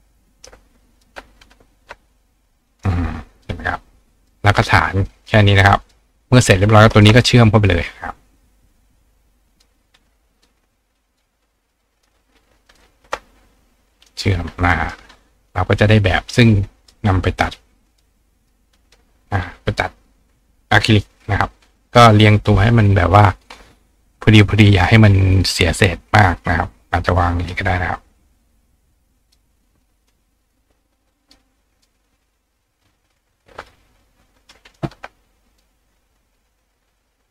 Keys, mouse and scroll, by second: 0.1 right click, 1.4-2.8 ctrl+drag, 2.7-4.6 right drag, 3.4 click, 4.2 click, 5.2 click, 5.8 click, 7.0 click, 9.5 click, 9.5-10.7 right drag, 10.4 click, 11.1 click, 11.1 right click, 12.0 click, 12.7 shift+click, 12.8-13.9 shift+right drag, 13.9 click, 14.9 click, 16.1-16.9 drag, 17.9 click, 18.5-24.8 drag, 24.9-26.3 drag, 27.5 click, 29.3 click, 30.1 click, 31.3 click, 31.8 middle click, 31.8 right click, 32.4-34.8 middle drag, 34.8 ctrl+right click, 35.5 middle click, 35.6 right click, 36.2-37.3 middle drag.